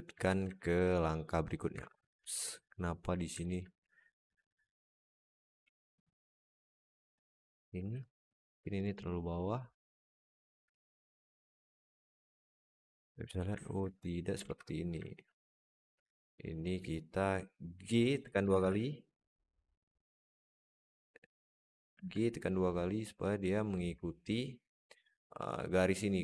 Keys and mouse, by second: 0.4 alt+shift+middle drag, 1.6 Tab, 2.1 alt+z, 2.4 alt+middle click, 3.3 alt+middle click, 4.1 ctrl+r, 5.5 alt+z, 5.7 alt+middle click, 6.5 Tab, 6.8 alt+middle click, 7.7 Tab, 8.1 alt+z, 8.8 click, 9.5 click, 10.6 Tab, 10.9 alt+z, 11.1-12.2 alt+middle drag, 13.5 alt+middle click, 13.7 Tab, 14.3 alt+z, 14.9 alt+shift+middle click, 15.2 alt+middle click, 15.7 click, 16.1 click, 16.3 click, 18.3 g, 20.1 middle click, 21.3 click, 21.7 g.